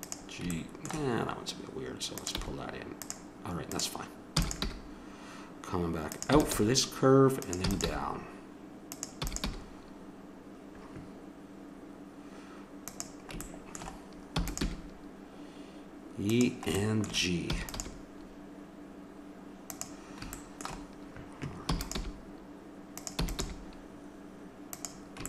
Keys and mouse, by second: 2.1 right click, 2.3 g, 4.3 e, 4.6 g, 6.3 e, 6.5 g, 7.6 e, 7.9 g, 9.2 e, 9.5 g, 14.3 e, 14.6 g, 17.5 e, 17.7 g, 21.7 e, 22.0 g, 23.2 e, 23.4 g.